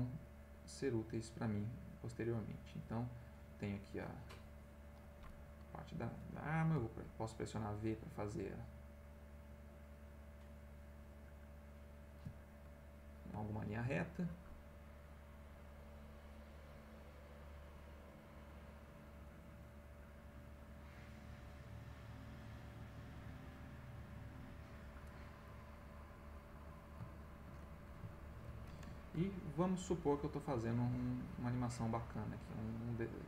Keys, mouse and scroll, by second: 0.3-3.1 drag, 3.5-5.1 drag, 6.7 v, 7.5-9.4 drag, 9.7 click, 10.5-12.3 drag, 12.9 middle click, 13.5 ctrl+middle click, 14.9 click, 16.1 click, 16.7 click, 17.2 click, 18.9 click, 20.2-22.0 drag, 22.5 click, 23.3 click, 24.0 click, 24.7 click, 25.5 click, 26.2 click, 27.1 shift+middle click, 28.7 ctrl+alt+v, 29.1 ctrl+alt+middle click, 29.8 click, 30.3-32.2 drag, 32.5 click, 33.0-33.2 drag.